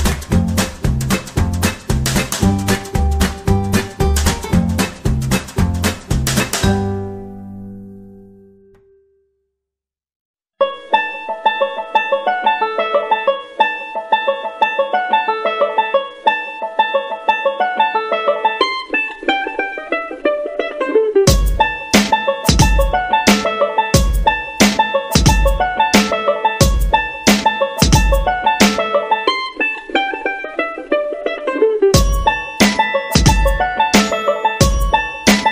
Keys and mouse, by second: 1.0 alt+z, 1.3 shift+middle click, 2.1 alt+z, 3.1 right click, 3.2 g, 4.3 g, 6.6 right click, 7.1 shift+right click, 8.2 g, 9.0 shift+middle click, 10.2 g, 10.9 right click, 11.1 g, 11.8 shift+middle click, 12.8 g, 13.5 shift+middle click, 14.3 shift+middle click, 15.3 c, 16.2 g, 18.0 r, 20.2 right click, 20.4 g, 21.1 c, 22.0 g, 23.7 r, 24.8 shift+middle click, 25.6 right click, 25.9 g, 27.2 right click, 27.4 g, 28.0 middle click, 29.0 ctrl+r, 31.8 c, 32.6 g, 34.3 shift+middle drag, 34.9 shift+middle click.